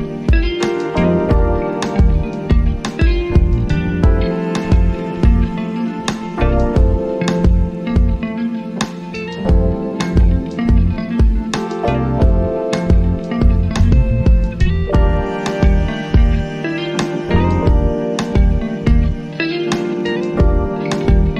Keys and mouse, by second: 3.8 click, 4.2 click, 6.5 click, 9.9 typing, 12.7-16.7 drag, 13.1 typing, 16.7-20.0 drag, 17.0 typing.